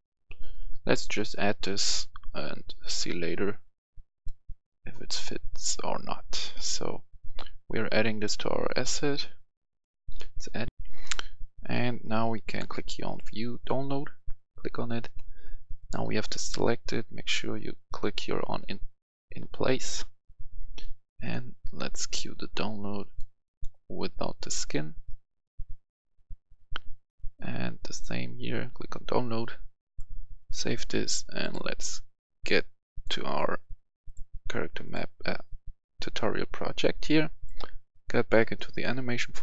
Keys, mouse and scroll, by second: 10.7 F10, 13.0 click, 33.0 click, 37.6 click.